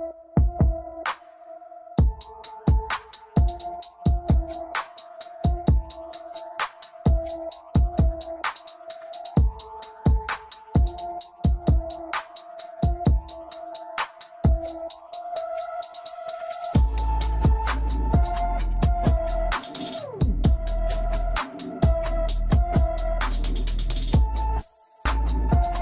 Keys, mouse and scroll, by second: 1.0-1.8 drag, 2.7-5.1 drag, 5.8-6.1 scroll down 1, 6.1-8.1 middle drag, 8.1-9.0 scroll up 3, 13.1 click, 19.3 middle click, 20.8 middle click, 21.7 middle click, 24.5 middle click, 24.6 click, 24.7-25.8 middle drag.